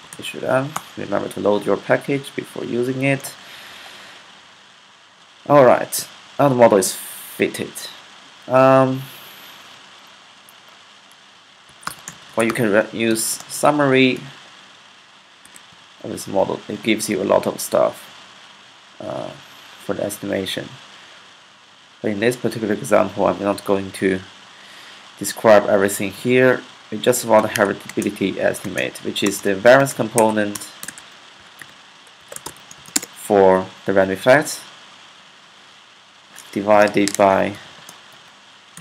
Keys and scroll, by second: 0.0-0.4 typing, 2.4-3.2 typing, 3.4 Up, 3.5 Up, 11.3-15.9 typing, 13.5 Left, 27.0-32.9 typing, 31.4 alt+4, 34.1-35.2 typing, 36.4-38.8 typing, 37.9 Left.